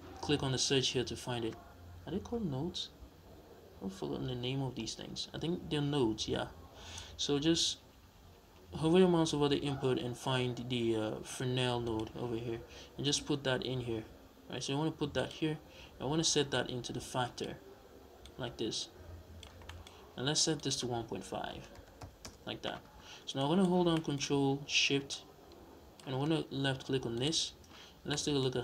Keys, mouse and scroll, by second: 15.2 click, 16.4 click, 18.1 drag, 19.6-20.5 middle drag, 19.8-20.5 scroll up 2, 20.5-23.3 drag, 22.2 Return, 23.0 scroll down 1, 23.3-25.0 middle drag, 25.0 click, 27.1 ctrl+shift+click, 28.0-28.6 middle drag, 28.5-28.6 scroll up 2.